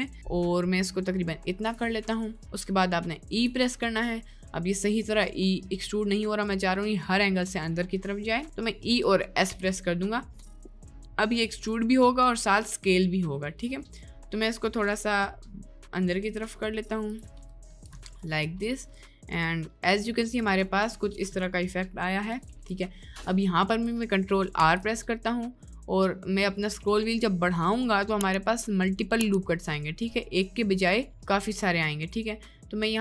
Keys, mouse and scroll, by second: 3.5 e, 17.6 middle click, 17.9 3, 18.2 middle click, 21.0 middle click, 21.1 Tab, 21.5 middle click, 22.4 Tab, 22.7 middle click, 23.0 middle click, 24.6 ctrl+r.